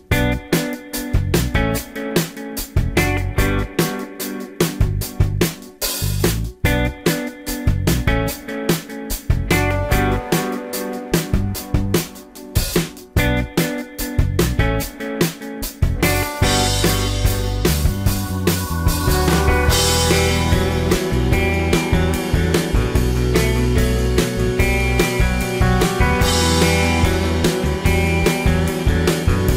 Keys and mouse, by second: 0.5 ctrl+s, 2.2 shift+s, 3.8 shift+a, 5.9-7.4 drag, 7.7 space, 11.4-14.7 drag, 14.7-18.1 middle drag, 18.1 g, 19.8-20.4 middle drag, 21.2 g, 22.8 g, 24.3-25.6 drag, 26.7 g, 27.5-28.1 drag, 29.0 drag, 29.4-29.5 drag.